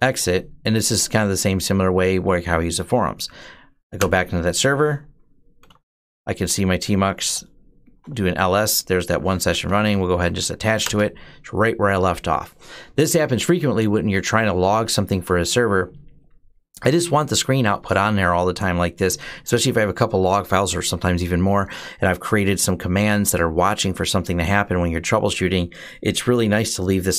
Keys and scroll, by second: 2.9 Up, 3.8 Return, 5.2-7.5 typing, 7.8 Return, 9.2 Up, 9.5-10.7 typing.